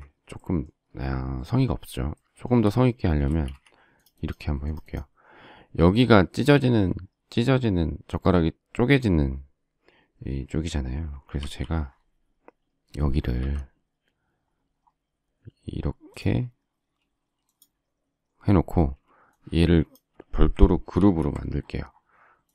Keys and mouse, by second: 3.2 shift+space, 3.4 Escape, 11.4 alt+t, 13.4 alt+x, 18.7 space, 20.9 ctrl+g.